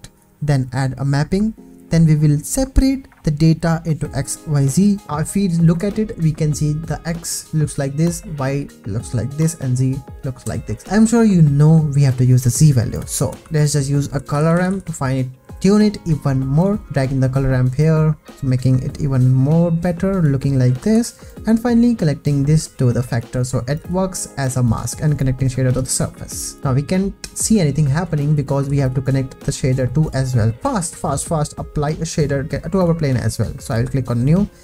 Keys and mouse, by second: 0.6 p, 1.1 click, 1.6 click, 2.0 shift+a, 5.0 ctrl+shift+x, 12.9 click, 13.4 shift+a, 17.8-20.3 drag, 20.9 ctrl+s, 22.2 drag, 23.7 drag, 23.8 g, 25.2 drag, 26.4 click, 26.6 ctrl+s, 28.6 g, 31.0 click, 34.0-34.6 drag.